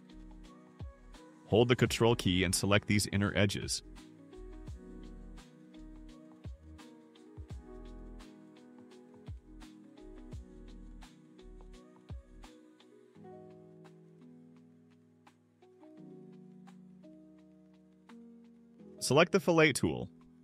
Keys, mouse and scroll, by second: 1.4 click, 2.1 scroll up 2, 2.2 middle click, 2.4 middle click, 4.3 middle click, 5.0 click, 5.3 middle click, 5.7 middle click, 5.9 click, 6.9 middle click, 6.9 scroll up 1, 7.2 ctrl+middle click, 7.8 ctrl+click, 8.1 middle click, 8.1 scroll down 1, 8.5-9.6 drag, 9.9 ctrl+middle click, 10.7 ctrl+click, 11.3 click, 12.1 middle click, 12.1-12.7 scroll down 6, 12.4 middle click, 13.3-13.7 scroll up 4, 13.7 middle click, 15.8 ctrl+click, 16.1-16.5 scroll down 4, 16.6-17.7 drag.